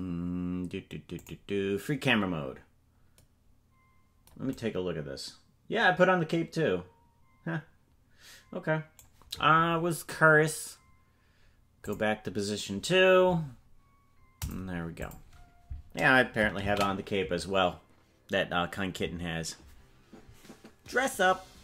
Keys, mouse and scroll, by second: 18.7 ctrl+s.